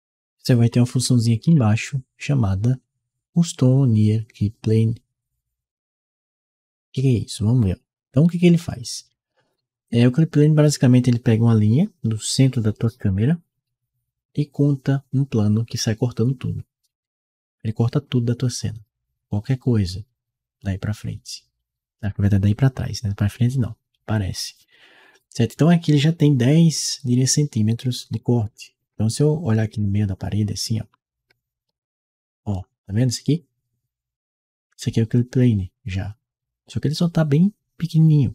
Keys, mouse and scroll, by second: 7.1-9.8 right drag, 28.2-32.3 right drag, 28.6 a, 29.5 d, 31.5 w.